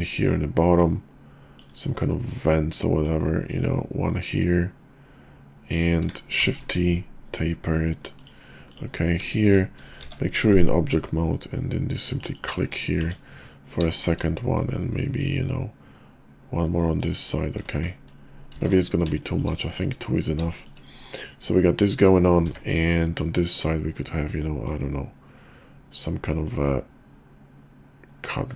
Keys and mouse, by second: 0.7 click, 2.3-8.3 drag, 9.3 shift+middle click, 9.9 shift+v, 12.1 ctrl+click, 13.0 `, 13.9 shift+click, 17.0 ctrl+click, 18.5 ctrl+z, 19.2 shift+click, 20.5 shift+click, 22.4 d, 24.6-28.5 drag.